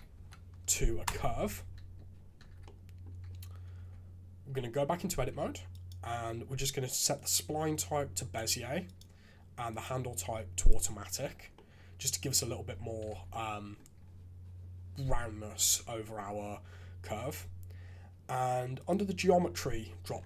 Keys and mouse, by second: 2.4 shift+z, 3.9 Tab, 5.3 a, 5.9-8.3 drag, 8.8-10.6 drag, 11.3 shift+z, 13.1 shift+z, 13.3 click, 15.7 shift+z, 18.7 click.